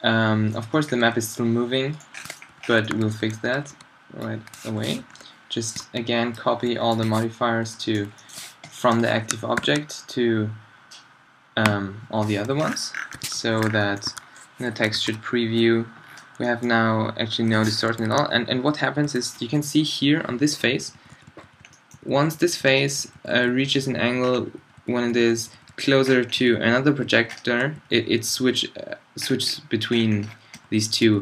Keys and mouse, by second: 0.7-2.9 drag, 1.0 g, 2.5 z, 3.4 a, 3.7 b, 5.0 alt+t, 5.8 b, 7.6 b, 9.5 ctrl+l, 12.4 z, 13.3 alt+z, 14.1 a, 14.9 alt+a, 17.9 Escape, 18.8 Left, 19.1 Right, 20.4 Right, 20.7 Right, 20.8 Right, 21.0 Right, 21.1 Right, 21.4 Right, 21.6 Right, 22.0 Right, 22.1 Right, 22.3 Right, 22.5 Right, 22.6 Right, 23.0 Right, 23.2 Right, 23.3 Right, 23.5 Right, 23.7 Right, 23.8 Right, 24.0 Right, 24.2 Right, 24.4 Right, 24.6 Right, 24.8 Right, 25.1 Right, 25.2 Right, 25.4 Right, 25.6 Right, 25.7 Right, 25.9 Right, 26.4 Right, 26.5 Right, 26.7 Right, 27.1 Left, 27.3 Left, 27.5 Left, 27.8 Right, 28.0 Right, 28.3 Left, 28.6 Right, 29.2 middle drag, 30.7 Right, 30.8 Right, 31.1 Left.